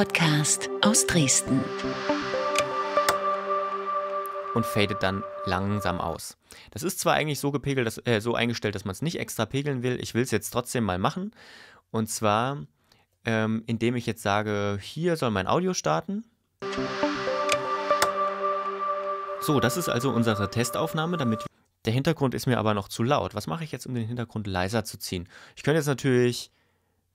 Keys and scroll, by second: 6.1 space, 16.6 space, 21.5 space.